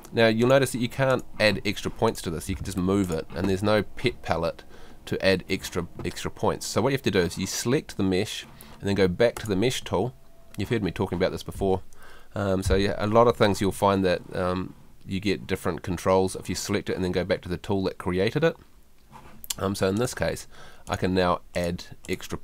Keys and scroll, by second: 2.6 super+z, 5.6 ↺.